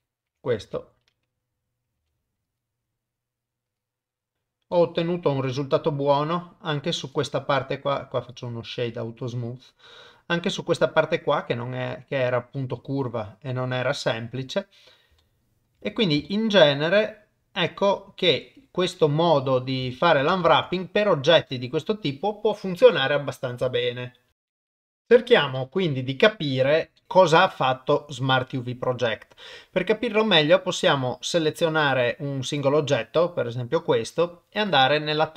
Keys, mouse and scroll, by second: 0.3 Tab, 0.6 a, 2.0 u, 4.7 middle click, 5.3 Tab, 6.1 middle click, 7.3-8.4 right drag, 9.3 middle click, 10.8-12.9 middle drag, 15.2 shift+middle click, 16.3 shift+middle click, 18.4 middle click, 18.9 middle click, 19.9 shift+middle click, 20.5 ctrl+s, 20.8 middle click, 21.5 shift+middle click, 25.7-26.9 middle drag, 27.0 shift+middle click, 27.5 middle click, 32.5 click, 33.0 middle click.